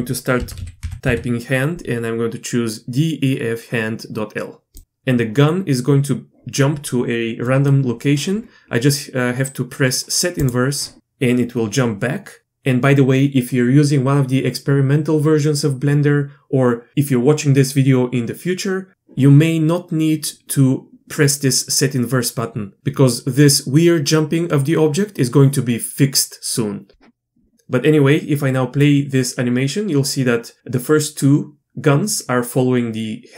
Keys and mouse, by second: 28.8-33.3 drag.